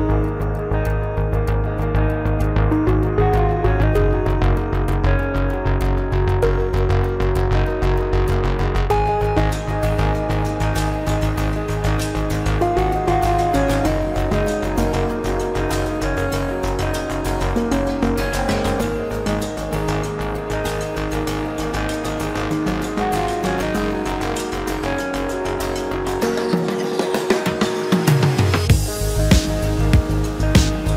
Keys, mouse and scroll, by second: 2.2 shift+click, 3.5 shift+click, 7.8 ctrl+z, 9.5 Escape, 13.9 space, 14.6 shift+click, 15.3 shift+click, 15.9 shift+click, 20.3 2, 20.4 Return, 23.6 Return.